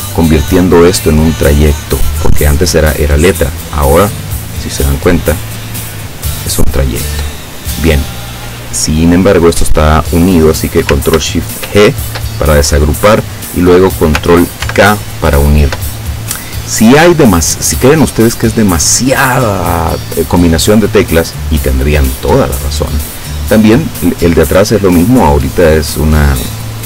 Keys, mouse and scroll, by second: 4.6 click, 6.0 click, 7.4 click, 8.9 click, 11.7 ctrl+shift+g, 14.7 ctrl+k, 18.3 click.